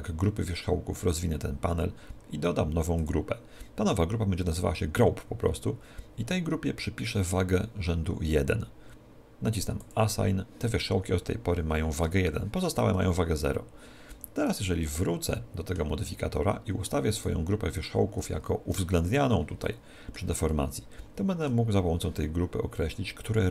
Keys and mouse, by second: 1.1 click, 3.0 click, 9.8 click, 13.6 Tab, 14.2 z, 15.1-18.2 middle drag, 18.2 right click, 19.8-22.4 middle drag.